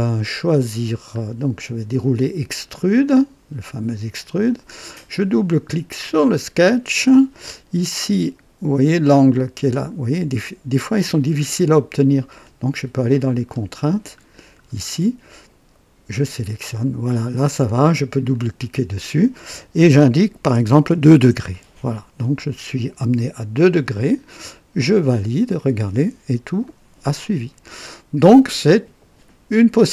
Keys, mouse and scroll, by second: 0.7-1.0 scroll down 2, 3.0 click, 6.0 click, 12.3 click, 13.4-14.6 scroll down 3, 16.0 click, 18.1 click, 20.9 KP_2, 21.2 Return, 23.6 click, 24.7 click, 26.6-28.9 drag.